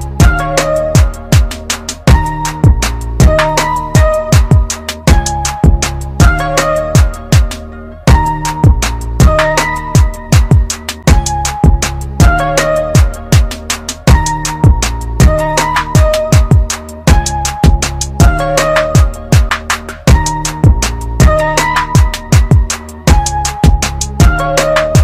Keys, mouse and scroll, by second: 1.4 F9, 2.7 right click, 4.7 click, 10.5 click, 16.5 click, 22.2 alt+Num_Lock.